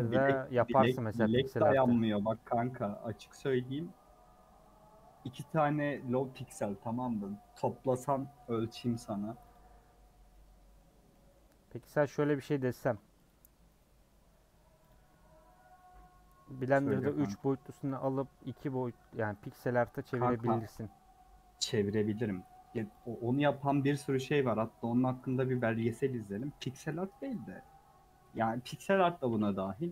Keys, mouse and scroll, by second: 0.1 scroll up 1, 0.5 middle click, 1.3 click, 1.5-2.1 scroll up 2, 1.7 Tab, 3.0 u, 4.2 scroll up 4, 4.7 scroll down 2, 5.8 KP_Decimal, 6.8 2, 8.6 a, 9.5 u, 10.3-11.3 middle drag, 11.3-12.1 scroll down 1, 12.1-12.5 scroll down 2, 12.7 ctrl+r, 14.0 scroll up 2, 14.9 Left, 17.1 ctrl+Left, 18.0 a, 18.8 u, 19.6 middle click, 20.3-21.2 scroll up 4, 20.6 shift+middle click, 21.2 scroll down 2, 21.5 middle click, 21.8-22.2 scroll up 1, 22.2 scroll down 1, 23.0 click, 24.9 ctrl+click, 25.4 a, 26.4 u, 27.3-29.2 middle drag, 29.2 scroll down 2, 29.6 3.